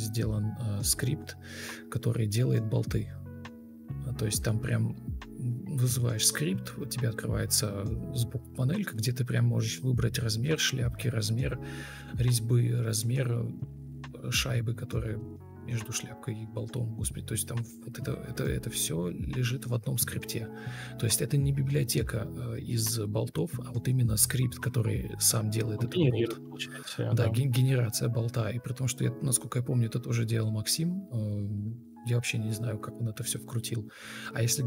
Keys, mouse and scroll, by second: 9.3 ctrl+space, 10.8 ctrl+space, 12.5 ctrl+v, 14.9 ctrl+space, 17.7 ctrl+space, 19.3 ctrl+space, 20.2 Escape, 22.5 Escape, 22.8 ctrl+space, 25.2 ctrl+z, 27.6 Escape, 30.5 ctrl+space.